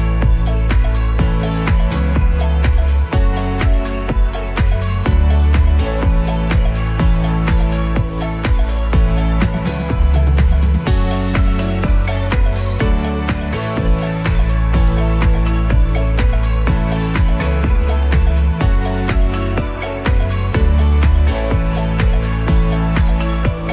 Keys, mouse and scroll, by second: 4.7-5.3 scroll up 1, 5.6 alt+right click, 6.3 right click, 7.0 click, 8.0 g, 9.3 scroll down 2, 9.6 alt+right click, 10.1 right click, 10.5 space, 12.9 space, 13.2 click, 13.7 click.